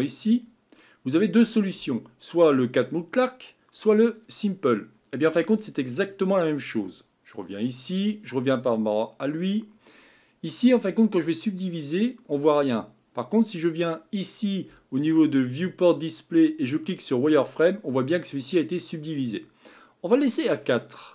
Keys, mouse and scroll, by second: 4.1 click, 5.5-17.3 drag, 17.8-19.7 scroll up 2.